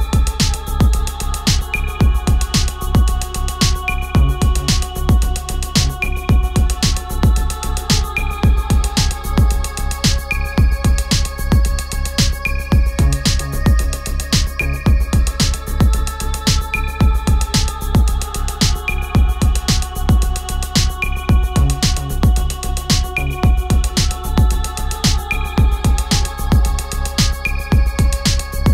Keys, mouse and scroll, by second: 2.8 click, 6.4 click, 8.9 shift+s, 11.5 h, 12.8-13.8 typing, 14.7-17.5 drag, 17.5-19.3 alt+drag, 21.2-24.3 typing, 25.1-28.2 drag.